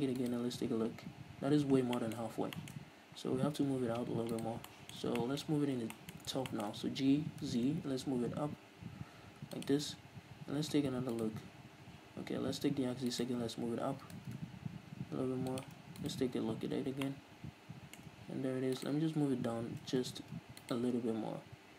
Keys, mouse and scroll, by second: 0.5 right click, 0.8-1.7 scroll up 1, 1.7 scroll down 1, 2.2-4.6 shift+middle drag, 3.0-3.4 scroll up 1, 4.0-4.6 scroll down 1, 4.6 right click, 5.0-9.9 shift+middle drag, 5.7-6.8 scroll up 4, 7.4 g, 9.9 shift+click, 11.5-14.3 right drag, 14.3 g, 16.0 shift+click, 16.3-17.4 right drag, 17.4-19.1 shift+middle drag, 19.1 right click, 19.9 g, 21.0 right click.